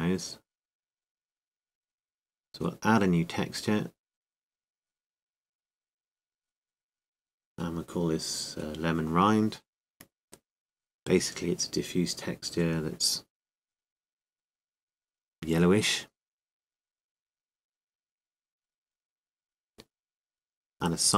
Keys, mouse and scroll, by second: 4.9-10.0 drag, 11.5-14.6 drag.